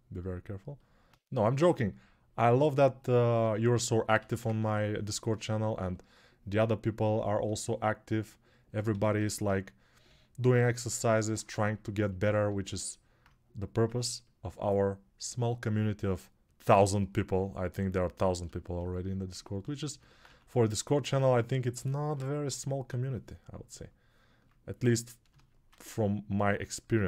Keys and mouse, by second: 4.0 1, 8.7 g, 12.7-27.0 alt+drag, 20.1 1, 21.9-22.7 [.